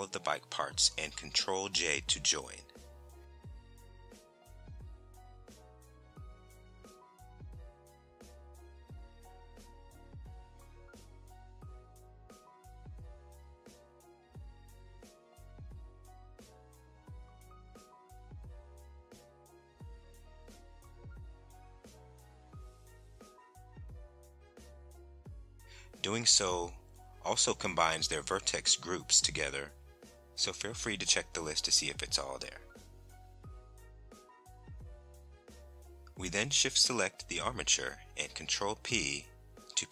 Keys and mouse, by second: 6.4 a, 10.2 shift+click, 11.4 shift+click, 15.8 ctrl+j, 20.6 ctrl+a, 22.4 ctrl+a, 23.8 ctrl+a, 27.3 Tab, 28.5 click, 31.6 click, 33.0-34.5 drag, 35.7 Tab, 39.0 shift+click.